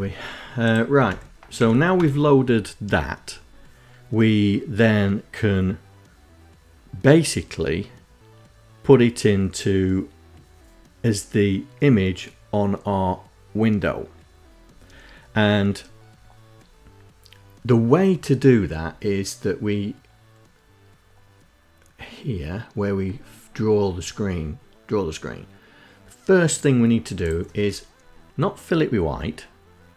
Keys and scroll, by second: 0.7 Down, 0.7 Up, 1.3 End, 1.6 Return, 27.3 Home.